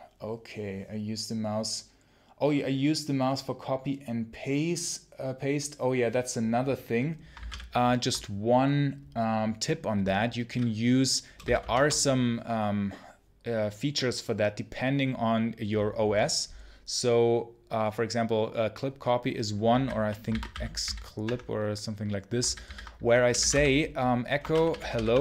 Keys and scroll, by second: 7.2 ctrl+c, 7.4 ctrl+l, 11.3 shift+c, 11.5 shift+space, 19.6 ctrl+f, 20.2 ctrl+c, 20.4 x, 20.7 c, 21.1 Tab, 22.3 ctrl+c, 22.5 ctrl+c, 22.9-25.2 typing.